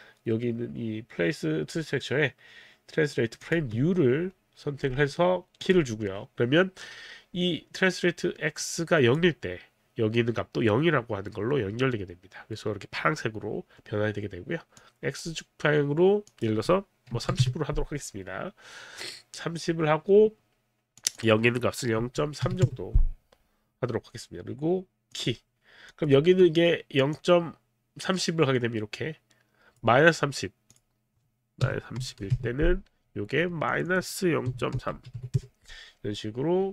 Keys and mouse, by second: 3.5 click, 5.6 click, 8.6 click, 14.7 click, 16.3 click, 17.1 KP_3, 17.2 KP_0, 17.5 Return, 17.5 KP_0, 21.0 click, 21.2 click, 22.1 KP_Decimal, 22.5 KP_3, 22.6 Return, 25.1 click, 25.9 click, 27.1 click, 30.7 click, 31.7 KP_Subtract, 32.0 KP_3, 32.2 KP_0, 32.3 Return, 32.9 Return, 32.9 KP_0, 33.7 click, 34.5 KP_Subtract, 34.7 KP_0, 35.0 KP_Decimal, 35.4 Return, 35.4 KP_3.